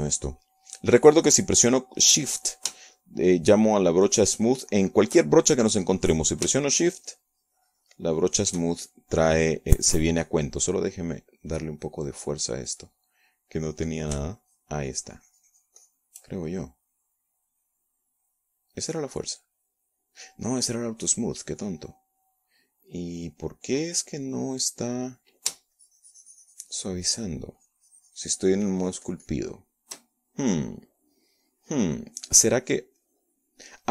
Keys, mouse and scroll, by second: 0.9 f, 1.9 click, 8.6-10.2 shift+drag, 14.4-15.4 drag, 16.0-17.8 shift+drag, 20.4-22.0 drag, 22.4 click, 27.4-28.6 shift+drag, 29.2-31.1 shift+drag, 33.8 click.